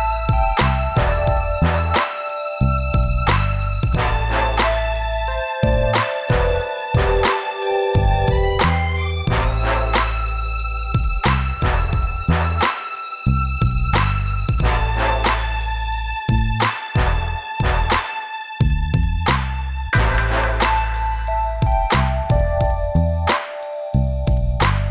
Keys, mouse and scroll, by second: 0.1 Return, 0.7 click, 0.7 click, 2.4 click, 2.5 click, 3.2 click, 3.3 click, 4.5 scroll down 1, 7.4 click, 13.0 right click, 13.1 right click, 13.6 scroll up 2, 14.8 m, 16.1 click, 16.1 click, 18.0 click, 20.0 p, 21.4 scroll down 1, 21.9 scroll down 1, 23.2 click, 23.3 click, 23.9 right click, 24.6 click.